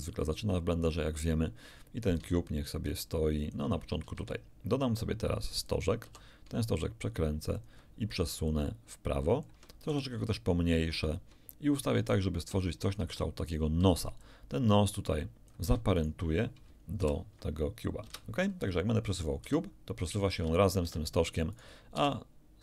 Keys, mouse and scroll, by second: 1.1-1.5 scroll down 2, 2.1-3.7 ctrl+drag, 4.1 ctrl+shift+a, 5.7 click, 6.1 r, 7.5 ctrl+click, 8.5-9.6 ctrl+drag, 9.9 ctrl+s, 11.1 ctrl+click, 12.0-13.1 ctrl+drag, 13.5 ctrl+middle click, 13.5 ctrl+scroll up 1, 14.2-15.7 drag, 15.9 shift+click, 17.0 ctrl+shift+p, 18.1 ctrl+Return, 19.1 right click, 19.4 g, 20.8 Escape, 21.5 right click, 21.9 g.